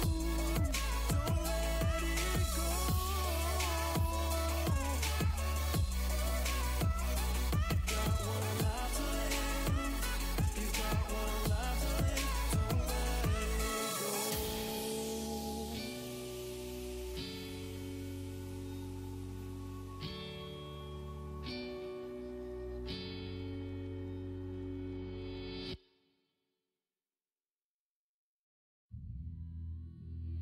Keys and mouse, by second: 0.1-4.6 middle drag, 5.5-7.5 middle drag, 11.3-15.4 middle drag, 15.6-17.7 middle drag, 18.9-22.5 drag, 22.5-24.6 middle drag, 23.1-24.6 drag, 24.9-28.0 middle drag, 26.1-28.0 drag.